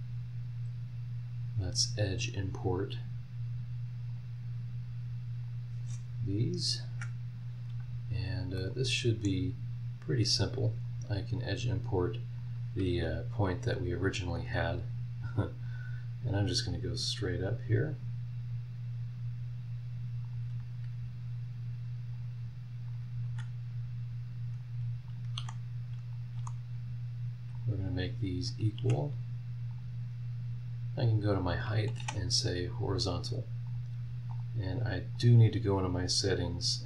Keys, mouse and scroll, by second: 0.8 scroll up 1, 1.1-2.1 middle drag, 2.1 click, 2.4-3.4 middle drag, 4.1 click, 5.4 click, 6.1-6.8 scroll down 2, 6.9 Escape, 7.2 scroll up 1, 8.3 scroll down 1, 8.6 middle click, 8.6 scroll up 1, 8.7 right click, 9.4 scroll down 1, 9.8 scroll up 1, 10.8 click, 12.4 click, 13.3 Escape, 15.7 click, 17.5 click, 20.2 click, 22.1 click, 22.9 click, 23.2 Escape, 23.6 scroll up 1, 24.6 click, 25.1 click, 25.4 v, 26.1 click, 26.3 v, 27.5 click, 28.5 click, 28.8 e, 29.7 click, 30.0 scroll down 2, 31.3 click, 32.0 h, 33.6 click, 34.3 click, 35.1 click.